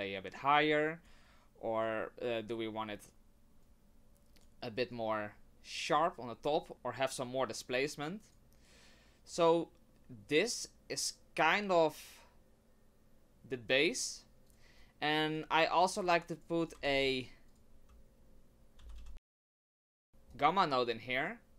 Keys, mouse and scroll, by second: 1.8 click, 3.6 click, 4.9 click, 6.7 click, 14.5 click, 14.8 click, 16.0 click, 16.6 click, 16.8 shift+a, 20.1 click, 20.3 click.